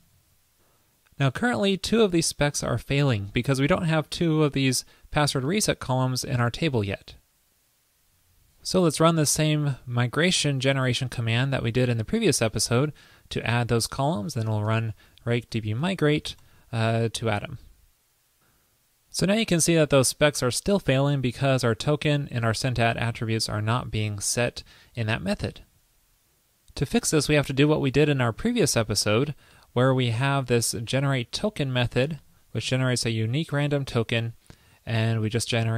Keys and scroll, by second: 0.2 super+s, 8.2 super+v, 30.8 super+v.